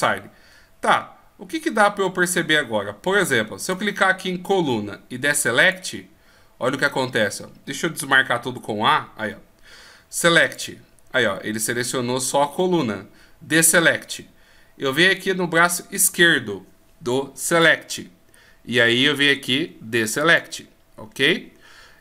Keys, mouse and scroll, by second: 3.6 click, 8.4 a, 10.4 click.